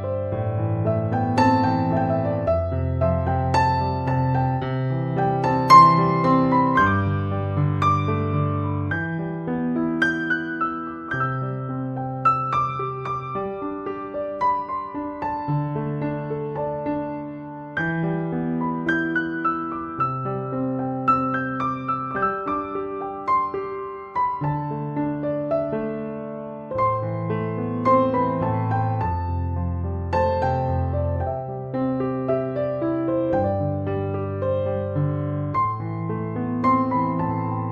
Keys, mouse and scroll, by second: 15.2 c, 15.3 o, 15.5 m, 20.3 right click, 36.9 Escape.